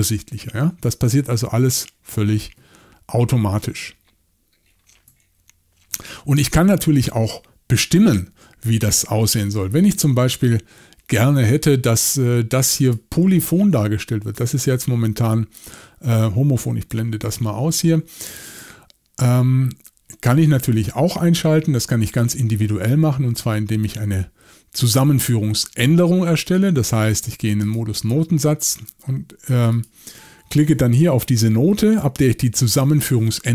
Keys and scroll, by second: 9.4 y, 9.5 y, 17.2 alt+a.